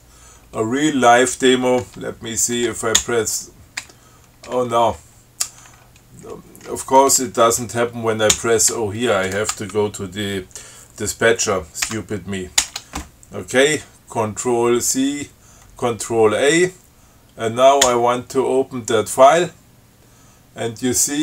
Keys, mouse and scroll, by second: 3.2 shift+o, 4.1 shift+BackSpace, 4.7 BackSpace, 8.6 o, 9.0 BackSpace, 12.1 ctrl+c, 12.9 ctrl+a, 18.1 o.